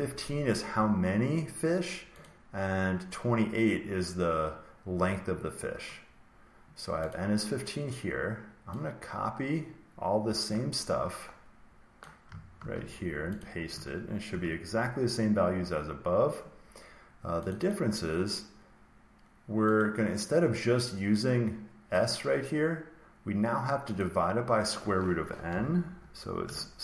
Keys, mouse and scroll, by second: 2.2 click, 7.0 click, 11.9 click, 12.5 ctrl+c, 13.3 click, 14.3 ctrl+v, 17.4 click, 17.6 click, 19.7 click, 23.9 click, 25.4-26.8 typing.